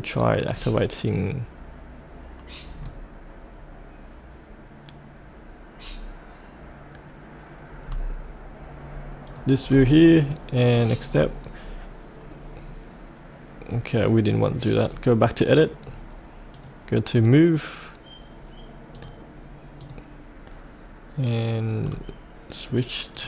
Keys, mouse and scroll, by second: 2.7-7.8 scroll down 1, 7.8-9.2 scroll up 1, 9.2 click, 9.6-10.9 scroll up 1, 10.9 click, 13.9 right click, 14.8 click, 15.8-16.5 scroll down 1, 16.5-20.8 drag, 21.8-23.1 scroll up 1, 23.1 click.